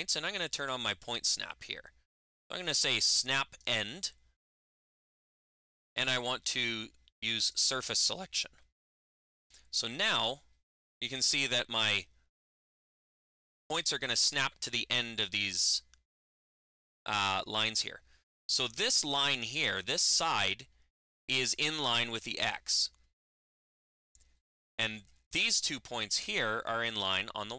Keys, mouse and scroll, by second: 3.4 click, 7.3 click.